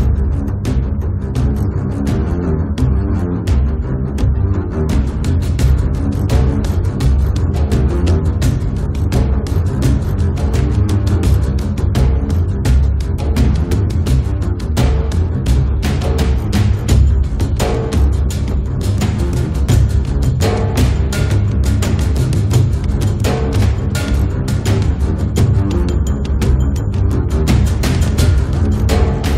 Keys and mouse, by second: 0.3-4.9 middle drag, 5.3-12.8 middle drag, 5.3-6.5 right drag, 9.9-13.8 drag, 9.9-12.8 right drag, 13.6 middle click, 13.6 right click, 14.1 click, 14.1 right click, 18.4 click, 18.6-19.7 middle drag, 19.7 KP_3, 20.4 click, 20.9 r, 22.3 ctrl+a, 23.3 click, 23.9 g, 23.9 f, 24.6-26.2 drag, 26.2 middle click, 26.4 click, 27.3 middle click, 28.1 click, 28.8-29.3 middle drag.